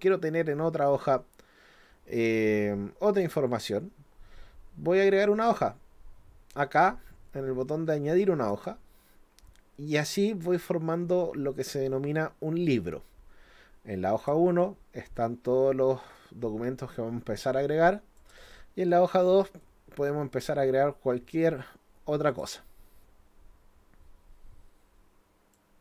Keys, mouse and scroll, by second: 8.5 click, 14.2 click, 18.2 click, 22.3 click, 25.5 click.